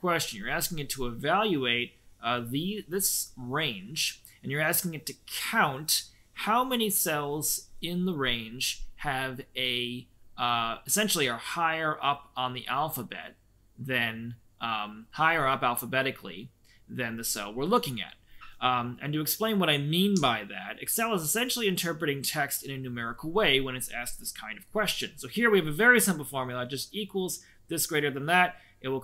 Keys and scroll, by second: 20.1 Escape.